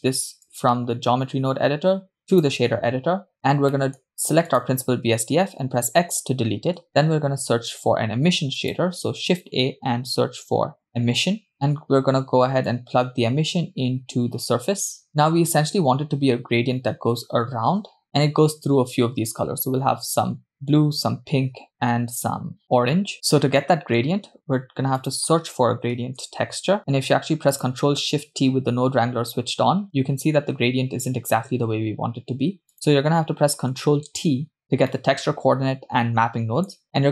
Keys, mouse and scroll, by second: 1.1-2.6 drag, 3.3-3.7 scroll down 4, 3.7 middle click, 4.5 click, 6.0 x, 7.6 shift+a, 11.5 middle click, 11.5 scroll up 5, 12.7 click, 13.1-15.0 drag, 23.6 middle click, 24.4 shift+a, 28.0 ctrl+shift+click, 32.7 click, 34.1 ctrl+t, 35.4-37.1 middle drag.